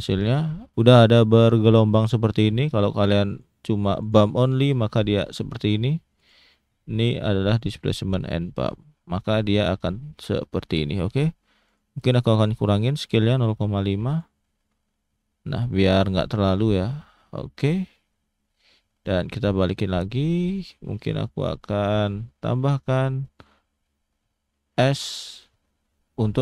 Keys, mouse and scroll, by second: 3.3 click, 6.1 click, 8.9 middle click, 10.3-11.0 scroll up 3, 11.0 middle click, 11.6 click, 15.9 middle click, 16.9 middle click, 18.2 shift+middle click, 19.6 click, 20.4 click, 20.9 middle click, 21.8 scroll down 1, 22.0 middle click, 23.2 click, 23.7 middle click, 24.8 s.